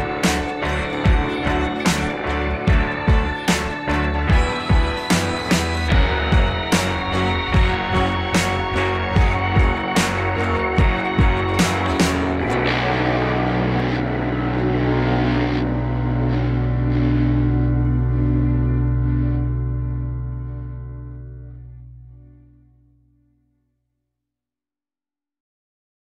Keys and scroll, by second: 0.6 Left, 0.7 Down, 0.8 Up, 1.0 Delete, 3.3 ctrl+z, 9.4 ctrl+a, 11.6 Right, 11.9 Right, 12.0 Left, 12.4 ctrl+=, 12.6 Down, 12.7 Right, 12.8 Left, 13.0 Right, 13.9 ctrl+0, 14.0 ctrl+=, 15.5 ctrl+0, 15.6 ctrl+-, 15.7 ctrl+=, 17.9 ctrl+[, 18.9 ctrl+0, 19.8 ctrl+0, 20.1 Escape, 23.0 Down, 23.5 Up, 23.7 Down, 23.9 Up.